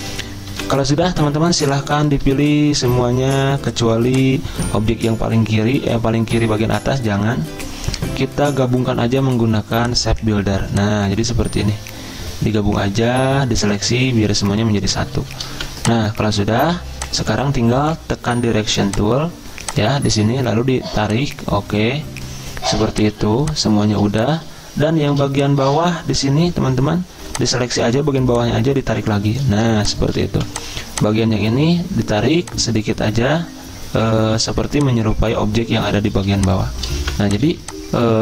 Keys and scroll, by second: 15.6 v, 23.2 z, 25.1 a, 29.6 z, 30.4 v, 31.6 a, 34.3 z, 37.0-38.2 typing.